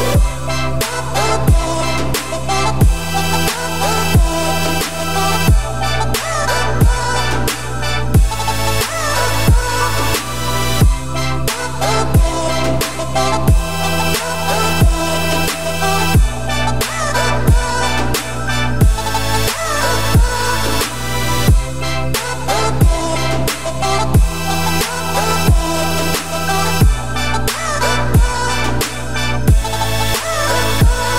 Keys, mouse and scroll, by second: 0.5 scroll down 2, 0.7-1.5 scroll up 2, 1.5 click, 2.5 Tab, 2.8 click, 2.9 2, 3.2 click, 3.5 shift+middle click, 4.0 shift+click, 4.7 shift+middle click, 5.1 shift+d, 6.4 p, 6.9 Tab, 7.3 click, 7.7 Tab, 8.2 Tab, 8.3 click, 8.5 Tab, 9.2 1, 9.5 click, 10.4 ctrl+c, 11.2 ctrl+x, 11.5 scroll up 2, 11.8 a, 12.1-12.6 scroll down 4, 12.6 e, 14.9 a, 15.1-16.0 scroll up 2, 16.0 scroll up 1, 16.2 e, 17.9 click, 18.2 2, 18.7 click, 19.2 click, 19.5 g, 20.7 click, 20.9 g, 21.9 a, 22.4 s, 24.1 Tab, 25.3 scroll down 2, 25.6-26.0 middle drag, 26.0-26.6 scroll up 4, 26.6 `, 27.0-29.2 middle drag, 29.2-30.7 shift+drag, 30.7 scroll down 1, 30.7-31.1 middle drag.